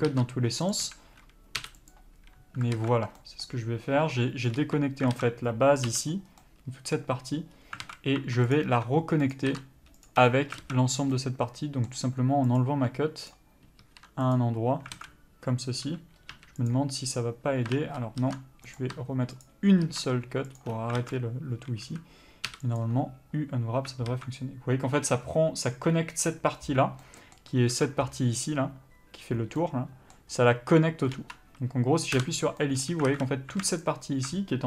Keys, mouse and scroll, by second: 0.2 ctrl+click, 1.0 ctrl+e, 1.1 a, 2.2 u, 3.1 alt+a, 4.9 3, 5.4 alt+a, 6.2 l, 6.7 middle click, 7.3 scroll down 1, 7.8-8.1 scroll up 1, 8.1 alt+a, 8.5 2, 8.8 click, 9.6 ctrl+click, 10.4 ctrl+e, 10.9 alt+a, 11.4 middle click, 12.8 click, 13.6 ctrl+click, 14.7 ctrl+e, 15.3 alt+a, 16.1 l, 17.0 u, 18.0 ctrl+z, 19.0 click, 19.7 ctrl+click, 20.9 ctrl+e, 21.3 alt+a, 22.1 a, 23.1 u, 24.4 alt+a, 27.4 middle click, 28.0 alt+a, 29.9 middle click, 31.4 3, 32.5 l, 32.9 middle click, 33.4 alt+a, 34.1 alt+shift+click.